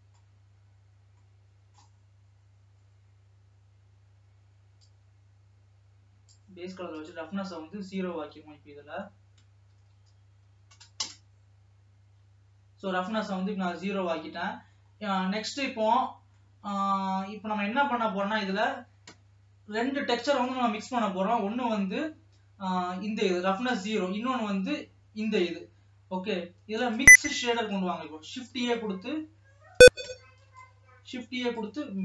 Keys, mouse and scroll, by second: 0.0-32.0 middle drag.